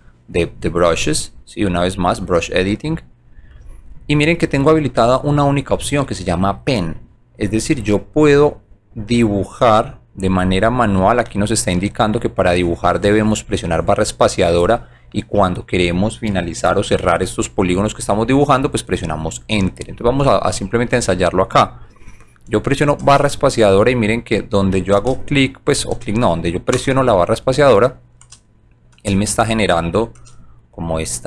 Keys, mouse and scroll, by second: 1.1 click, 2.9 click, 6.0 right click, 7.4 click, 8.9 right click, 21.6 click, 23.1 space, 26.8 space, 29.0 space.